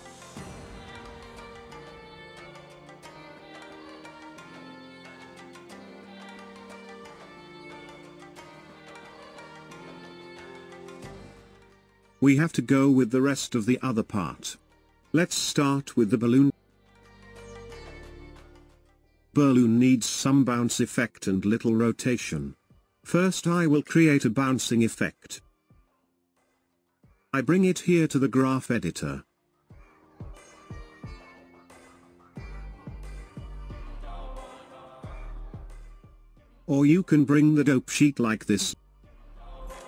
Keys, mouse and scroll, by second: 10.0-12.0 drag, 12.0-13.1 scroll up 3, 13.1 click, 15.0-16.1 shift+middle drag, 16.1-17.0 scroll up 2, 17.0-17.7 scroll down 1, 17.7-28.1 shift+middle drag, 28.1-34.3 drag, 37.4-39.8 drag.